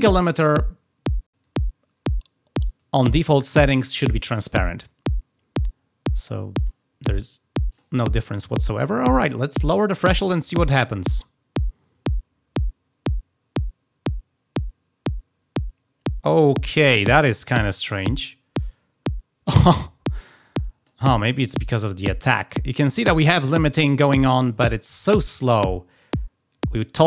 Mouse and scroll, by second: 6.5 click, 7.6 click, 10.7-16.9 drag, 20.1 click.